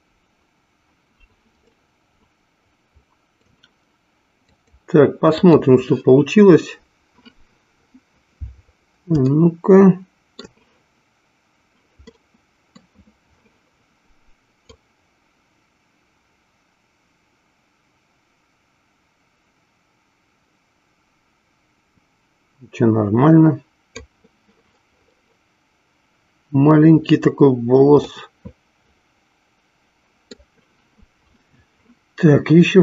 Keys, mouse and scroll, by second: 1.8-3.6 middle drag, 4.7-6.6 drag, 9.6 shift+middle click, 12.2 middle click, 14.7-24.5 drag, 28.5-30.6 middle drag.